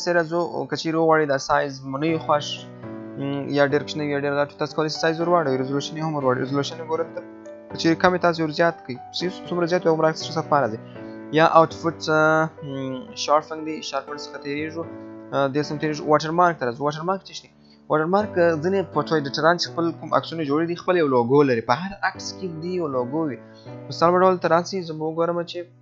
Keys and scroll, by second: 24.1 super+d.